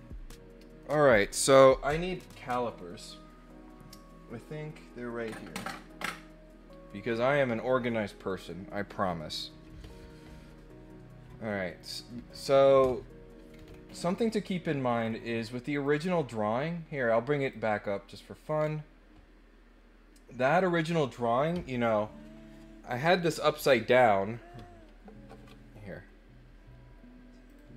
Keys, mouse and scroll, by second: 13.5 scroll down 4, 13.8-14.3 scroll up 4, 14.4 middle click, 15.7 click, 17.4 click, 18.2 scroll up 2, 18.5 scroll down 2.